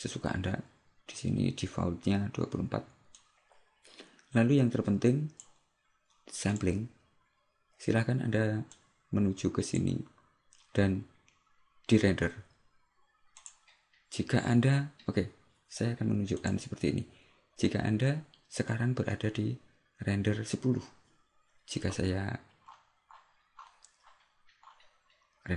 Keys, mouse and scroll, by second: 3.3 click, 6.6 click, 13.5 click, 22.8-24.3 scroll up 10, 24.8-25.5 scroll up 3.